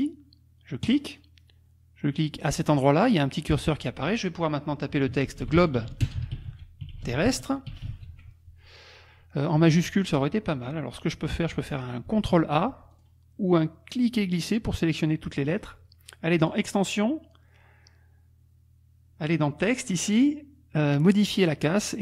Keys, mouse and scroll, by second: 0.9 click, 2.5 click, 5.1-8.4 typing, 12.3 ctrl+a, 12.9 ctrl+click, 13.9-15.7 drag, 16.4 click.